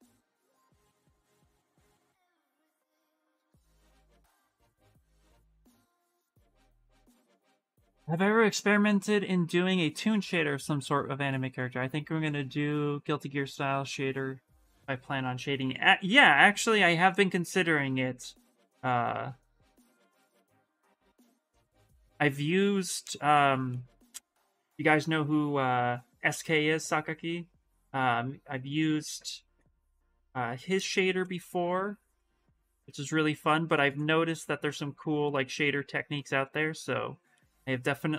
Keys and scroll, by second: 25.9 s, 32.5 s.